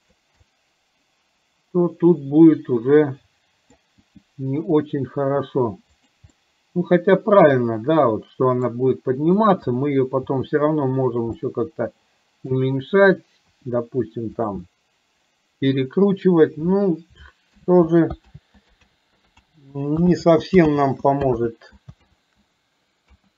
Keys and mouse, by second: 0.6-3.8 middle drag, 4.1 g, 6.6-8.7 middle drag, 9.6 click, 10.4 g, 11.6-12.7 middle drag, 13.7 r, 14.7-15.9 middle drag, 17.6 ctrl+z, 18.3 ctrl+z, 19.1 ctrl+z, 19.6 ctrl+z, 20.3 ctrl+z, 20.8 ctrl+z, 21.6 ctrl+z, 22.1 ctrl+z, 23.2 KP_1.